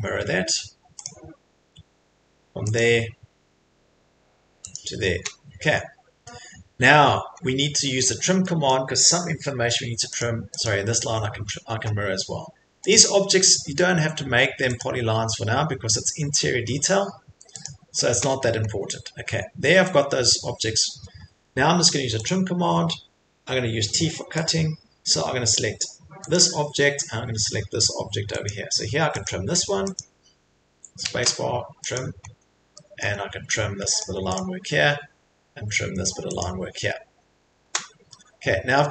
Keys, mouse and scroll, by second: 1.0 click, 2.8 click, 4.7 click, 6.8-7.5 scroll, 8.7-9.0 scroll, 10.2 click, 10.6 click, 12.9 click, 14.8 click, 17.6 click, 18.1 click, 18.1 scroll, 22.3 click, 22.7 middle click, 24.5 click, 26.3 click, 27.0 scroll, 28.4 click, 29.4 click, 29.6 middle click, 29.9 click, 31.9 click, 32.2 right click, 33.0-33.9 scroll, 34.0 click, 34.0 middle click, 34.3 click, 36.4 click, 36.8 middle click, 36.8 middle click, 37.1-37.6 scroll, 38.7 middle click.